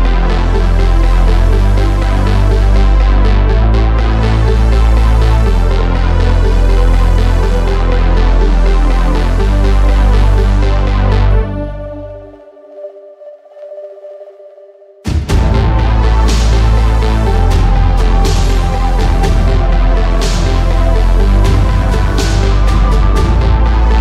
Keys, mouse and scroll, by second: 1.3 middle click, 1.7 shift+s, 2.6 a, 2.9 Tab, 3.7 shift+a, 4.8 middle click, 5.5 g, 6.8 Tab, 8.6 k, 10.1 KP_7, 10.5 k, 11.9 k, 13.2 k, 14.9 k, 16.3 k, 17.4 k, 20.7 KP_3, 21.1 e, 22.1 s.